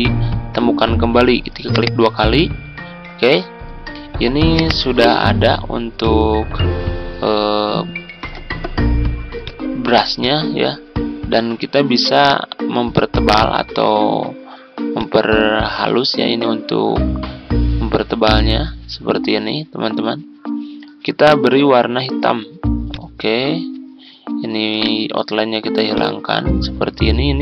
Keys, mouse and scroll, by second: 7.0-7.5 ctrl+scroll up 2, 9.3-21.9 drag, 24.7 right click, 25.9-27.4 drag.